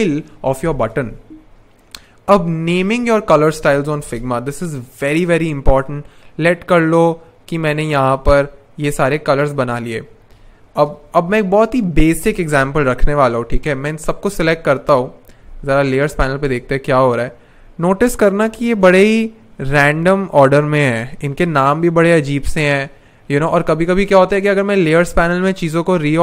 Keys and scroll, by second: 3.9 super+\, 10.8 super+/, 15.3 super+\.